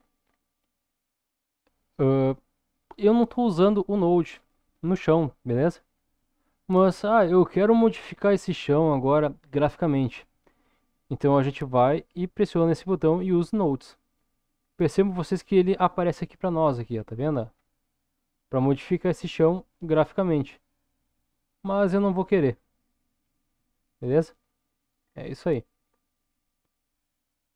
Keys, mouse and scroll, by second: 0.5-1.7 middle drag, 13.7 click, 16.2-20.6 scroll up 6, 21.2 click, 24.0 click, 25.0-26.4 scroll down 2, 26.5 click.